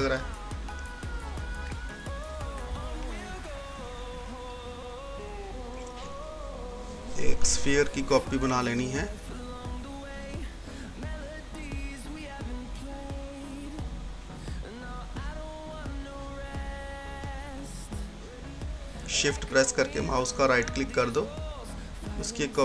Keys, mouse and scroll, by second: 0.3 scroll down 1, 1.2-2.8 scroll up 1, 7.1 click, 9.5 scroll down 1, 10.1 scroll up 1, 14.6-19.4 drag, 19.4 shift+right click, 22.4 click.